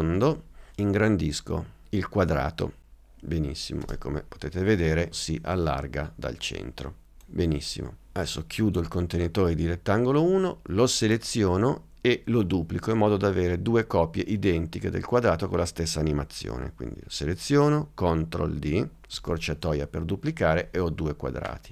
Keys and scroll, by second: 19.2 super+d.